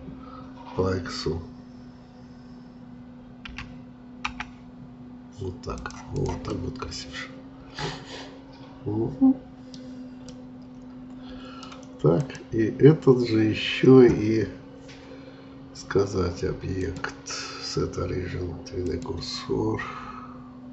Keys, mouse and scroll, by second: 3.5 s, 6.1 click, 6.5-9.5 middle drag, 10.3-12.1 middle drag, 12.1-15.2 drag, 16.8-20.7 drag.